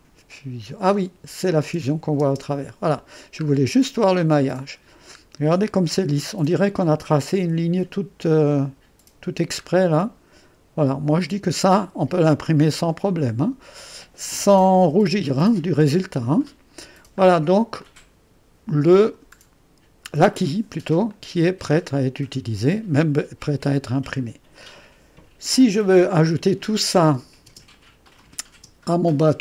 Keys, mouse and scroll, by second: 0.0 click, 0.9 space, 1.6 space, 2.2 space, 3.8 scroll down 1, 4.0-6.2 drag, 6.2-8.4 scroll up 1, 8.4-9.5 scroll up 1, 9.5 scroll up 1, 9.6-10.5 scroll down 1, 10.5-11.6 scroll down 1, 11.6-12.5 scroll down 1, 12.5-14.8 drag, 14.8 3, 16.1 scroll down 1, 16.2-17.3 drag, 17.3-17.8 scroll down 1, 17.9-19.8 drag, 21.1-27.5 drag, 27.5 space, 28.1-29.4 drag, 28.6 space.